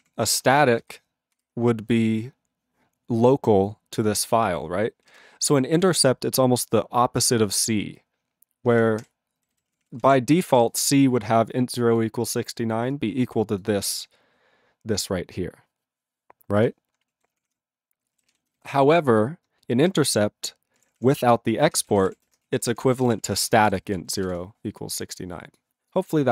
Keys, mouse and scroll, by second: 0.0 ctrl+p, 0.6 ctrl+space, 0.9 ctrl+alt+f, 5.1 ctrl+g, 5.4 ctrl+n, 5.5 ctrl+n, 5.8 ctrl+p, 6.0 ctrl+p, 8.7 ctrl+space, 8.7 ctrl+a, 9.0 ctrl+w, 9.4 ctrl+n, 9.5 ctrl+n, 9.7 ctrl+p, 9.8 ctrl+p, 9.9 ctrl+space, 10.0 ctrl+e, 10.1 ctrl+g, 10.6 ctrl+s, 12.0 click, 12.9 click, 13.6 click, 16.6 click, 17.2 ctrl+a, 17.3 ctrl+p, 17.5 ctrl+p, 18.3 ctrl+s, 18.4 ctrl+n, 18.6 ctrl+n, 19.9 alt+d, 20.8 ctrl+d, 20.8 ctrl+p, 21.0 ctrl+p, 21.5-22.6 typing, 22.7 ctrl+e, 22.8 ctrl+n, 22.9 ctrl+n, 23.0 ctrl+e, 23.0 ctrl+g, 23.2 ctrl+p, 23.3 ctrl+p, 23.4 ctrl+a, 23.5 ctrl+space, 23.6 ctrl+e, 23.6 ctrl+g, 23.7 ctrl+n, 23.9 ctrl+e, 24.3 ctrl+s, 25.0 click, 25.1 click, 25.6 click, 25.9 click.